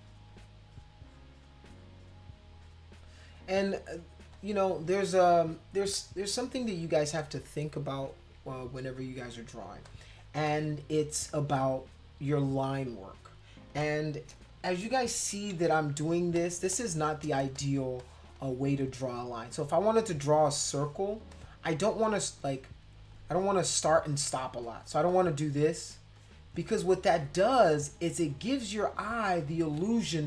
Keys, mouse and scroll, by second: 0.0 click, 0.3 click, 0.7 click, 1.1 click, 1.4 click, 1.7 click, 2.2 click, 2.5 click, 3.0 click, 4.2 space, 4.3 click, 5.7 space, 5.9-7.0 drag, 7.2 click, 9.7 space, 9.8 click, 10.4 click, 13.7 space, 13.8 click, 15.3 ctrl+=, 15.5 ctrl+=, 15.7 ctrl+=, 16.0 space, 16.3 click, 16.7 click, 17.5 space, 17.6 click, 18.0 click, 18.2 scroll up 2, 18.4 click, 19.6-20.9 drag, 21.1 space, 21.3 click, 22.6 click, 24.3 click, 24.7 click, 25.1 click, 25.4 click, 25.8 click, 26.1 click, 26.6 click, 27.0 click, 27.5 click, 28.3 click, 28.9 click.